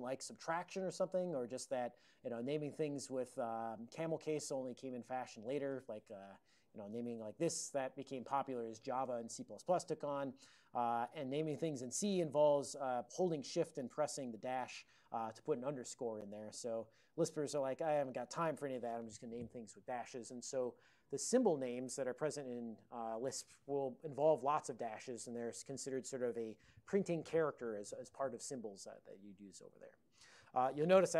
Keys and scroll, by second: 6.3 ctrl+d, 6.3 BackSpace, 7.1 shift+j, 10.5 BackSpace, 10.5 =, 11.2 BackSpace.